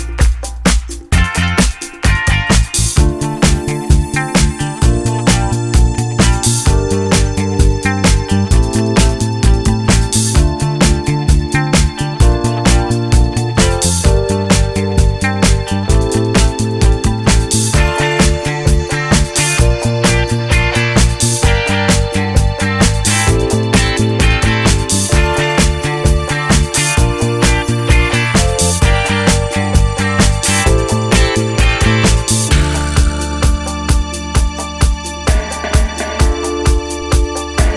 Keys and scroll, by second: 0.5 2, 0.6 Return, 1.7 0, 1.7 Return, 4.0 8, 4.0 Return, 5.1 7, 11.1 ., 16.4 -, 16.6 Return, 22.1 d, 22.9 2, 23.2 Return, 23.5 6, 29.0 Escape, 29.1 d, 31.2 1, 31.5 Return.